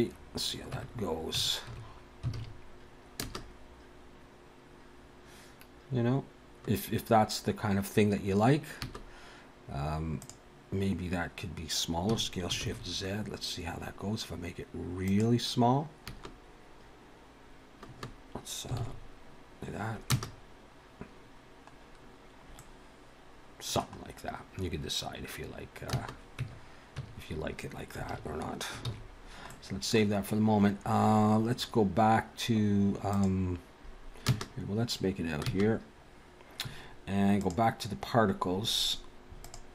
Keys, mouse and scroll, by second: 0.8 Tab, 1.4 Tab, 2.3 alt+a, 3.2 space, 8.9 space, 10.1 click, 12.1 s, 16.1 space, 18.0 space, 18.8 alt+a, 20.0 space, 21.9 scroll down 1, 22.6 middle click, 24.2-24.7 scroll up 1, 24.7 scroll down 1, 26.0 space, 26.4 Tab, 27.0 Tab, 28.1 alt+a, 28.9 ctrl+s, 29.5 middle click, 30.9 scroll down 1, 33.1 click, 34.3 space, 35.5 space, 37.4 click, 39.4 click.